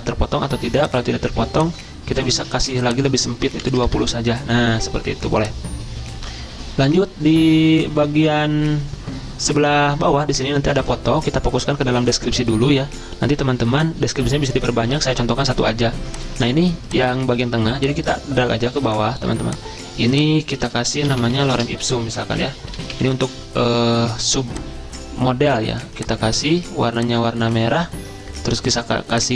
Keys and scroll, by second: 3.6 typing, 4.0 Return, 5.7 typing, 21.1-22.7 typing, 26.0 typing.